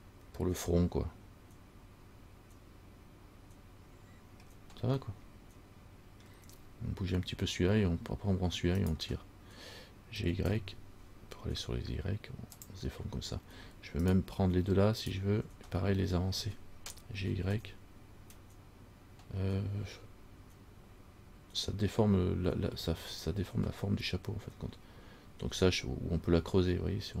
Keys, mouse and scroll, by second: 4.7-5.1 scroll down 1, 5.3 middle click, 9.0 right click, 10.4 g, 14.2 right click, 15.2 shift+right click, 17.4 g.